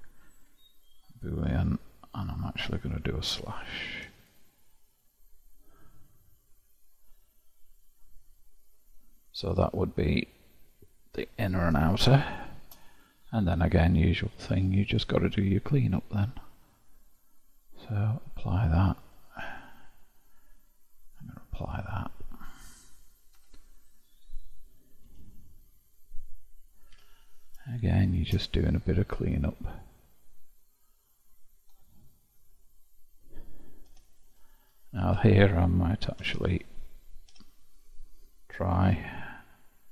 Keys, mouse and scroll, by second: 5.5-8.6 middle drag, 9.1 click, 10.0-14.9 middle drag, 14.9-21.1 drag, 21.6-23.4 drag, 23.4 Tab, 25.0 KP_Divide, 25.6-26.7 scroll up 1, 26.9 1, 27.8 shift+middle click, 28.5-29.4 scroll up 4, 29.4 scroll up 1, 29.5-31.9 middle drag, 31.9-33.9 scroll down 5, 33.9 3, 34.0 click, 35.0 ctrl+KP_Add, 36.2 shift+', 37.3 1.